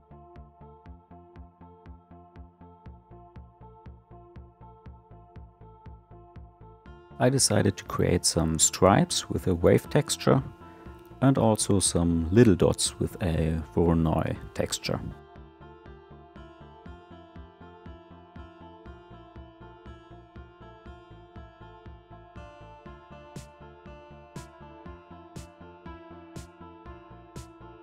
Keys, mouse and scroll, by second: 2.7 scroll down 4, 3.0 scroll up 1, 3.3 middle click, 3.8 click, 4.9 click, 5.0-6.2 middle drag, 6.5 click, 8.1 click, 10.2 click, 11.3 ctrl+shift+click, 11.7 middle click, 12.1 scroll down 1, 12.3 middle click, 12.9 scroll up 3, 13.1-15.4 shift+middle drag, 15.8 ctrl+shift+Left, 16.1 click, 19.7-21.6 drag, 21.6 shift+a, 22.5-24.3 drag, 24.3 scroll down 1, 24.4 scroll up 1, 24.6 scroll down 1, 24.7-25.5 shift+middle drag, 25.5-25.8 scroll down 1, 25.8 ctrl+shift+click, 26.1 middle drag, 26.4-27.6 scroll down 3, 26.5 shift+middle click, 27.6 click.